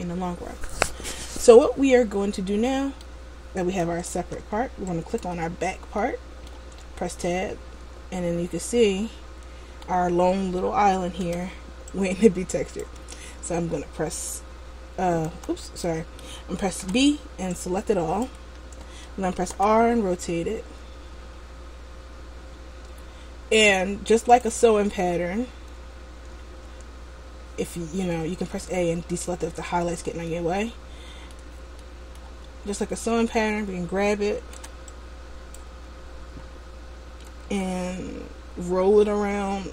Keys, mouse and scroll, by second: 1.8 middle click, 4.3 Tab, 5.2 right click, 6.1 middle click, 7.0 Tab, 8.2-9.0 scroll down 2, 9.0 middle click, 11.4 b, 15.6 a, 17.0 b, 19.7 r, 26.5 a, 29.4 shift+middle click, 30.4 middle click, 31.9 middle click, 34.7 b, 37.7 g.